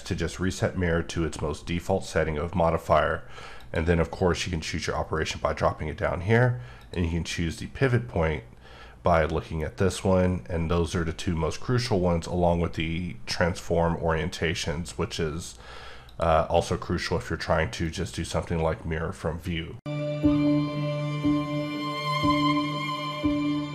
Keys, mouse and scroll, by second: 3.5 click, 6.8 click, 16.1 click, 17.8 click.